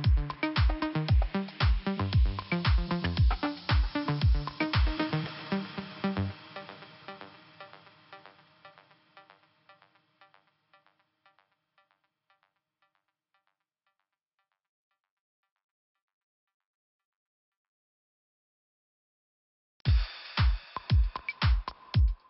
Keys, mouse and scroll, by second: 0.0 scroll down 2, 1.0 scroll up 1, 1.8 click, 1.8 click, 2.6 click, 5.6 click, 6.6-6.9 scroll down 1, 7.6 click, 7.7 click, 8.1 click, 8.9 click, 10.0 scroll up 3, 11.9 click, 12.5 click, 13.8-14.4 scroll up 2, 14.6 click, 15.2 click, 16.0 click, 16.9 click, 17.5 scroll down 1, 17.9 scroll up 1, 18.6-19.6 scroll up 2, 21.1 click, 21.1 click, 21.9 click.